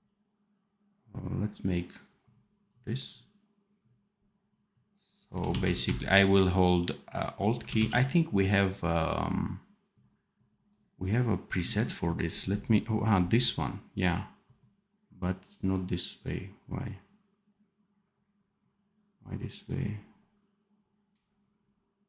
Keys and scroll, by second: 5.4 ctrl+z, 7.7 ctrl+z.